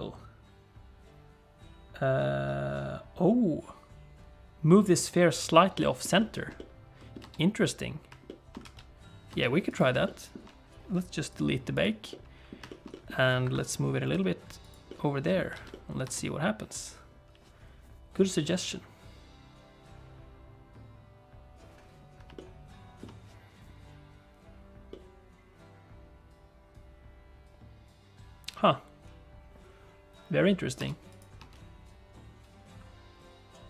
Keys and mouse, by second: 5.8 shift+middle click, 6.2 shift+middle click, 6.5 middle click, 7.2 space, 8.2 shift+click, 8.5 middle click, 8.6 alt+a, 9.3 space, 9.7 click, 10.0 shift+middle click, 11.3 click, 12.1 middle click, 12.6 shift+middle click, 12.7 shift+click, 12.9 middle click, 13.4 KP_7, 14.1 g, 14.8 middle click, 15.5 alt+a, 15.7 middle click, 16.0 space, 22.5 shift+middle click, 25.0-30.5 middle drag, 30.8 space, 31.1 click, 31.4 space.